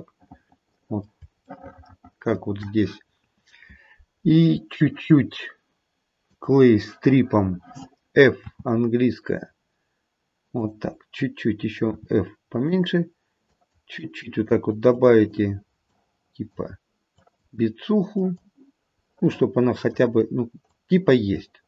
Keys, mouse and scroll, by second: 1.5 shift+middle click, 2.3 shift+middle click, 6.3 click, 8.3 f, 11.8 f, 13.5 click, 13.9 click, 14.5 click, 14.8 click, 15.8 click, 17.1 click, 18.1 click, 19.1 middle click, 20.6 click.